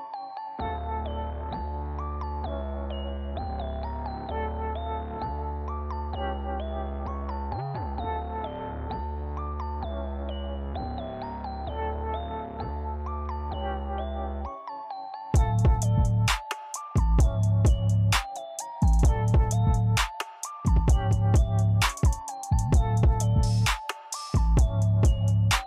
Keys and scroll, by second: 8.8-10.4 typing, 12.3 z, 13.7 i, 15.1 Escape, 15.4 p, 23.7 d, 24.9-25.6 typing.